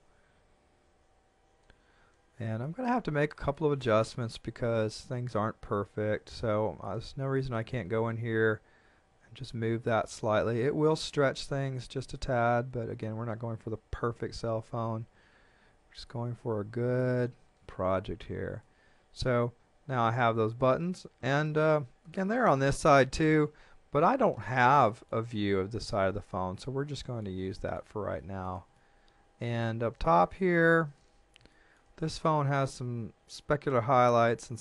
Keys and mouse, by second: 2.6 shift+middle click, 6.1 a, 6.5 b, 6.8 click, 9.1 g, 12.0 click, 13.8 Tab, 16.1 click, 18.6 middle click, 20.8 middle click, 28.2 shift+middle click, 30.6 shift+middle click, 31.5 shift+middle click.